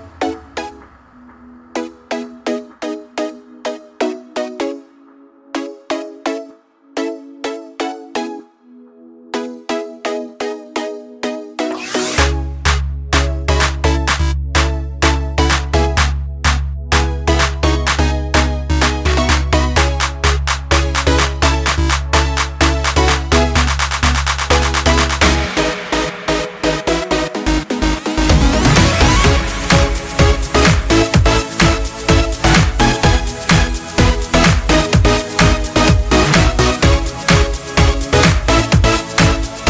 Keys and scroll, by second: 0.0 ctrl+z, 3.0 ctrl+z, 6.1 ctrl+space.